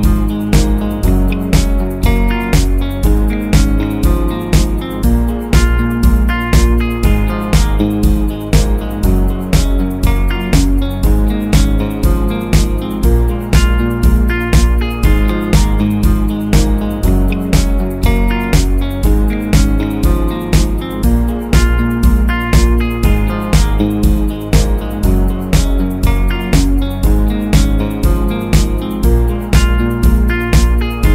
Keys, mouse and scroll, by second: 0.0 shift+click, 0.6 shift+click, 1.2 shift+click, 2.3 ctrl+g, 3.1 space, 3.3-5.2 drag, 7.0 space, 13.5 ctrl+c, 29.7 ctrl+v.